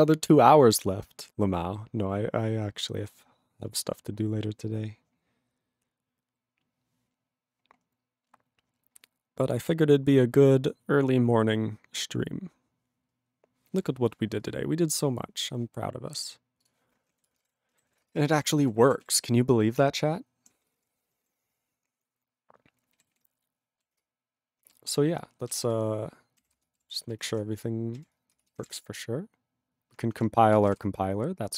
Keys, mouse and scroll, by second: 16.7 ctrl+s, 17.2 ctrl+a, 17.3 ctrl+space, 17.4 ctrl+e, 17.4 ctrl+g, 17.9 ctrl+s, 18.1 ctrl+space, 18.5 ctrl+alt+b, 18.7 ctrl+g, 19.1 ctrl+s, 19.3-20.5 ctrl+p, 20.5 ctrl+a, 20.7 ctrl+space, 20.8 ctrl+e, 20.8 ctrl+g, 21.3 ctrl+s, 23.2 ctrl+s.